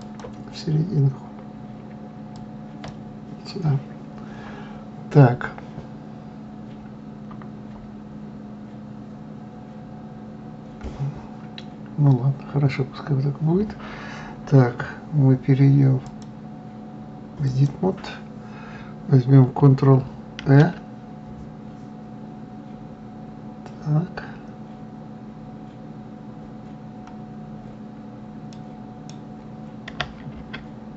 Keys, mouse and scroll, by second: 0.0-3.0 drag, 16.0-19.0 drag, 20.4 ctrl+r.